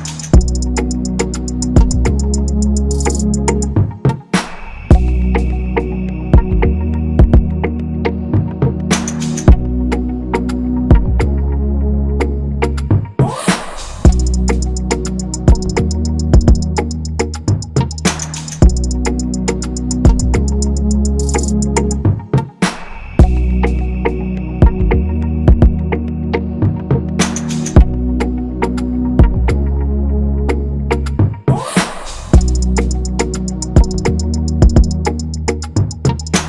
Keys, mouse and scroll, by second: 1.9 double click, 4.6 Escape, 5.8 ctrl+-, 5.9 ctrl+-, 6.6 Escape, 7.1 scroll up 1, 12.5 ctrl+z, 13.2 ctrl+-, 13.3 ctrl+-, 13.4 ctrl+-, 17.7 double click, 20.7 ctrl+=, 20.8 ctrl+=, 20.9 ctrl+=, 21.0 ctrl+=, 21.4-21.7 scroll up 1, 25.8 ctrl+=, 25.9 ctrl+=, 30.7 ctrl+-, 30.8 ctrl+-, 30.9 ctrl+-, 31.3 scroll, 32.2 alt+click, 36.3 shift+click.